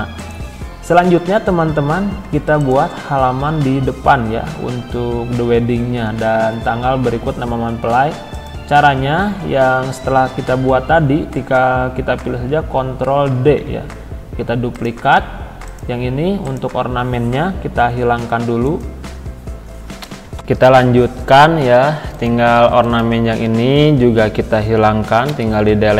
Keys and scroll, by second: 13.3 ctrl+d, 17.8 Delete.